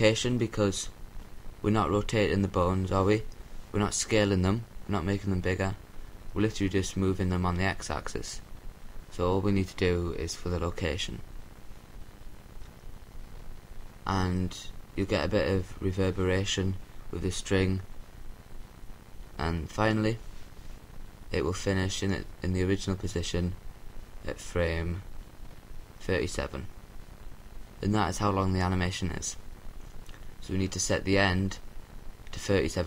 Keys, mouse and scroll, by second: 0.5-3.2 drag, 3.5-5.0 drag, 11.9 i, 15.2-16.7 drag, 20.6-22.4 drag, 23.0-24.2 drag, 25.4-26.9 drag.